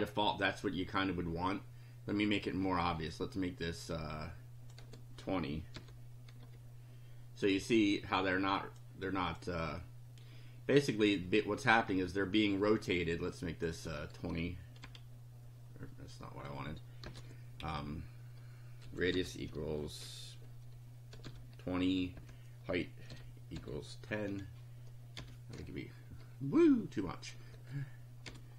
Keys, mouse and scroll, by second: 3.1-4.9 drag, 4.8 2, 5.8 0, 7.8-8.9 drag, 9.1 click, 11.0 click, 13.3 click, 13.9 2, 14.8 F5, 17.1 BackSpace, 17.2 1, 17.7 Left, 18.8 r, 19.1 =, 20.9-23.6 typing, 25.2 F5, 27.0 click, 27.6 1, 28.3 F5.